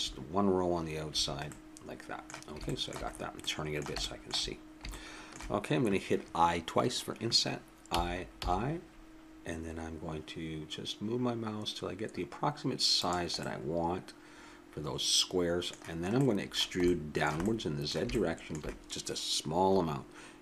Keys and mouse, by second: 1.5-6.8 middle drag, 7.9 i, 13.4-15.3 middle drag, 16.1-20.4 middle drag.